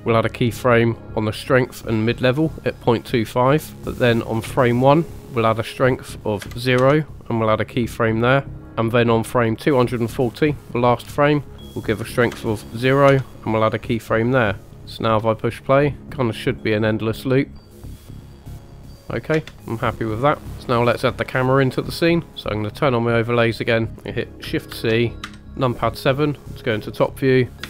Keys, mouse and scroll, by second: 0.0 click, 2.0 click, 4.2 click, 5.2 click, 5.7-6.8 drag, 8.6 click, 9.3 click, 11.5-13.2 drag, 14.4 click, 15.1 space, 19.3 space, 20.4 click, 20.5 scroll down 3, 20.5 scroll down 1, 22.0 middle drag, 22.7 click, 23.3 scroll down 2, 24.7 shift+c, 25.3 KP_7.